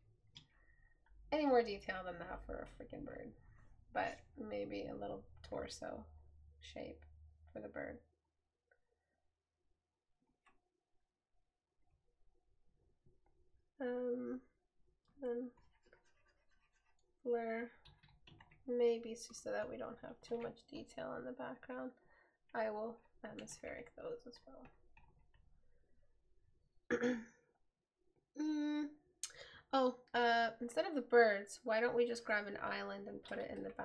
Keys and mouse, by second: 18.6 right click.